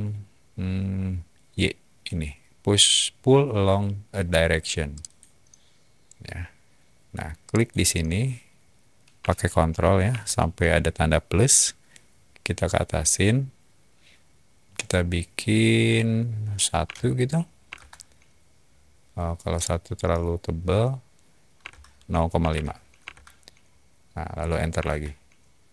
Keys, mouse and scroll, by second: 4.9 click, 7.4 click, 16.8 1, 17.6 Return, 19.5 middle click, 21.6-23.0 typing, 23.0 Return.